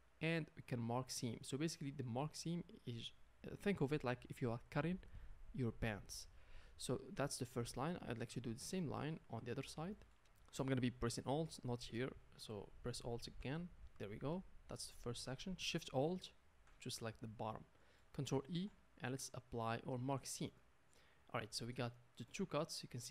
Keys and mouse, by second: 7.9 z, 12.9 alt+click, 13.1-21.0 alt+middle drag, 18.5 ctrl+e, 21.5 a, 21.6-23.1 middle drag, 21.6 a, 22.3 Tab.